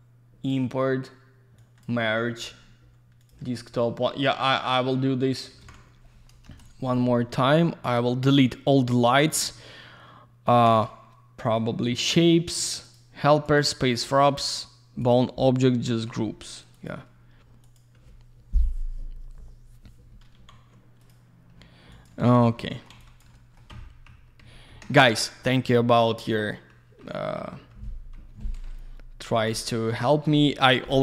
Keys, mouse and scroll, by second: 1.6 click, 3.2 click, 3.3 click, 5.6 ctrl+v, 6.5 Return, 7.8 click, 10.7 click, 12.1 click, 12.2 click, 12.5 click, 12.6 click, 12.8 click, 12.9 double click, 13.5 click, 13.6 click, 15.0 click, 15.1 click, 16.7 click, 16.9 click, 17.6 click, 17.7 click, 20.6 z, 21.0 click, 21.1 click, 21.9 click, 22.0 click, 22.2 alt+w, 22.5 alt+middle click, 22.9 alt+z, 23.0 click, 23.3 alt+middle click, 23.7 F3, 28.7 alt+middle click, 29.5 click, 30.3 F2.